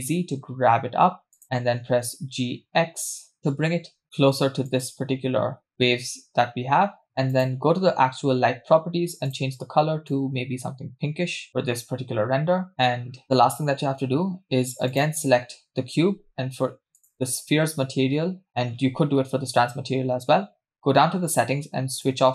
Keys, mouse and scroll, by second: 1.8 g, 7.3 click, 9.3 click, 12.7 scroll down 2, 13.1 scroll up 1, 13.2 space, 14.9 click, 17.0 click, 18.5-19.0 scroll down 2, 19.0-19.4 scroll down 4, 21.9 scroll down 2, 22.0-22.3 drag.